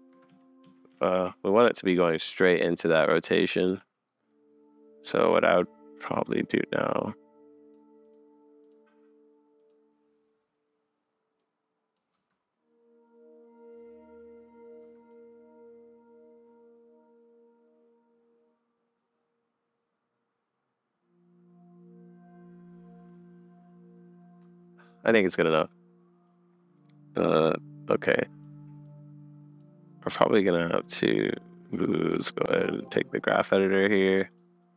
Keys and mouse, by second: 0.1 space, 0.3 Up, 0.6 Up, 0.9 Up, 1.0 Down, 1.1 Down, 3.1-3.6 drag, 5.1-7.7 middle drag, 8.0 click, 8.6 click, 9.6 click, 11.4 click, 12.1 space, 14.9 space, 15.1 click, 16.1-18.3 middle drag, 18.3-20.8 drag, 23.4 middle click, 24.3-25.8 middle drag, 27.7 middle click, 29.1 click, 31.8-33.1 drag, 34.3 click, 34.6 click.